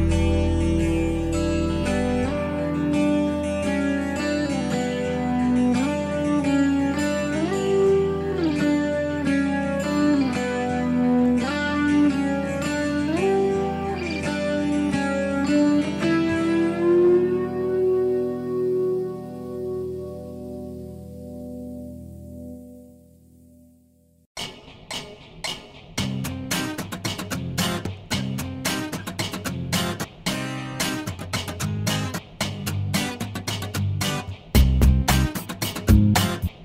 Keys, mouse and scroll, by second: 2.3 click, 4.3 click, 4.8-5.3 scroll down 1, 6.8 click, 10.0-11.9 middle drag, 12.8 click, 13.7 click, 15.6 click, 17.1 click, 18.7 click, 21.0 shift+right click, 22.4 p, 23.1-23.5 scroll up 1, 24.4-24.8 shift+scroll up 1, 25.0 shift+right click, 29.0 shift+right click, 31.7-32.3 scroll up 3, 32.4 shift+middle click, 35.6 shift+middle click.